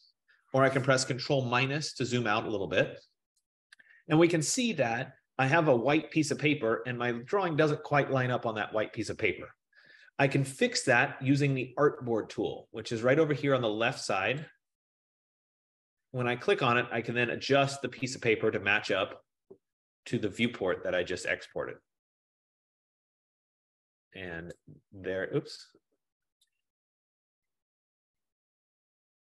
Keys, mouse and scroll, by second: 1.2 ctrl+-, 2.3 ctrl+-, 9.1 F15, 14.6 click, 19.1 click, 22.8-24.2 drag, 24.5-29.2 drag.